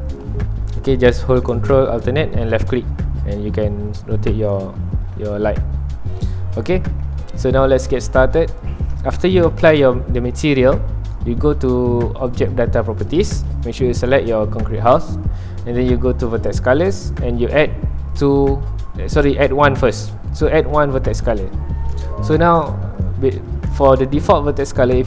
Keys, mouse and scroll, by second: 0.5-2.4 middle drag, 2.4-4.8 ctrl+alt+drag, 4.8 middle click, 5.4 ctrl+alt+click, 6.3 middle click, 6.9 s, 7.0 middle click, 7.3 scroll down 1, 7.4 middle click, 7.8-13.4 ctrl+alt+drag, 21.3 click, 21.5-22.7 middle drag, 22.7 scroll up 1, 22.8 middle click, 23.5 scroll up 1, 24.3 scroll down 1.